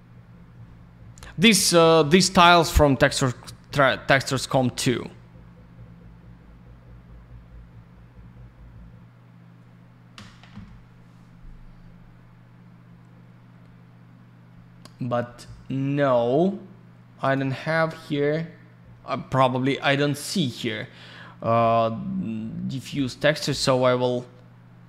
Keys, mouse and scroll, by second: 17.2 click, 20.4 right click.